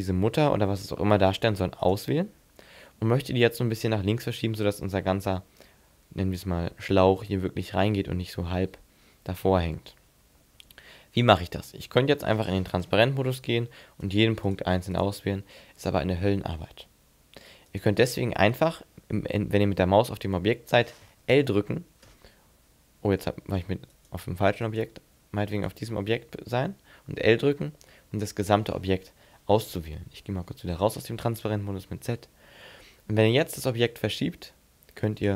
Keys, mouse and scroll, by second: 1.8 right click, 12.9 z, 14.0 shift+right click, 14.5 shift+right click, 14.9 shift+right click, 17.7 right click, 22.0 l, 23.9 right click, 24.6 right click, 25.6 right click, 27.4 l, 30.4 z, 33.4 click.